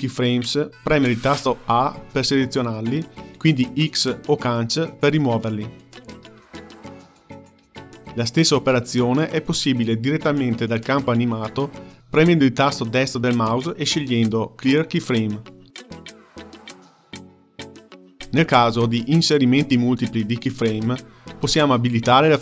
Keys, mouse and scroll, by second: 1.5 a, 3.2 x, 6.7 ctrl+z, 7.0 ctrl+z, 7.5 ctrl+z, 7.8 ctrl+z, 12.2-15.1 right drag.